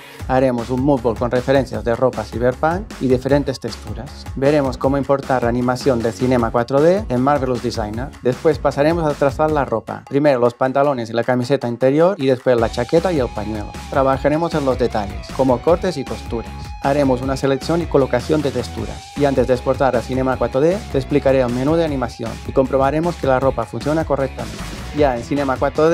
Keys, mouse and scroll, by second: 4.6 click, 5.2 click, 5.8 click, 6.6 click, 7.2 right click.